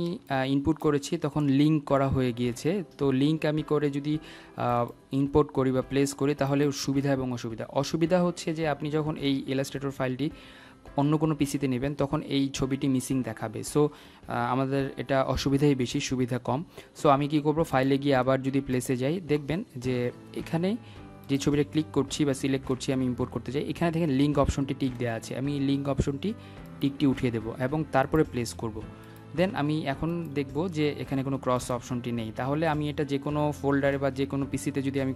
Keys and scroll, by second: 18.9 Delete.